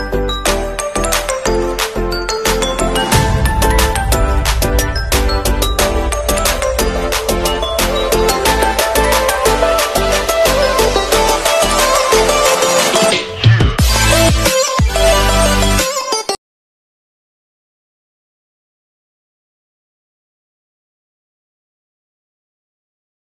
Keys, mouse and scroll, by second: 3.7 click, 5.9 right click, 10.2 alt+scroll down 1, 10.7 alt+scroll up 1, 11.5-12.8 scroll up 1, 14.2 ctrl+z, 15.0 z, 17.0 shift+click, 18.1 click, 19.0-19.8 alt+scroll down 2, 19.8 alt+scroll up 1, 20.4-20.8 scroll up 1, 21.0-23.3 alt+scroll up 1.